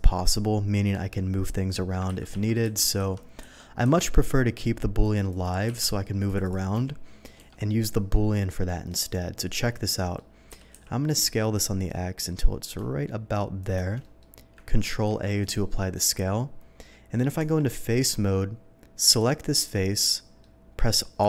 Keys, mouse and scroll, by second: 2.1 ctrl+z, 2.3 ctrl+z, 5.0 click, 5.3 click, 5.6 q, 6.2 click, 6.4 click, 6.8 g, 7.3 Escape, 8.1-8.5 middle drag, 9.6-10.1 middle drag, 10.9 s, 10.9 x, 13.6 shift+click, 14.0 shift+middle click, 14.8 ctrl+a, 15.4 click, 15.8 middle click, 17.4 Tab, 19.1 click, 19.6 middle click.